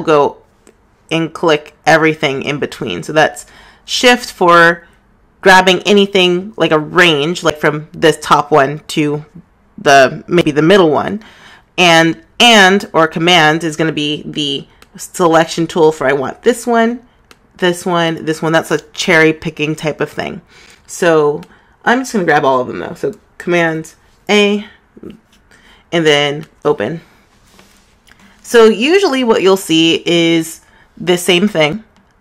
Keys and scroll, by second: 24.9 super+a.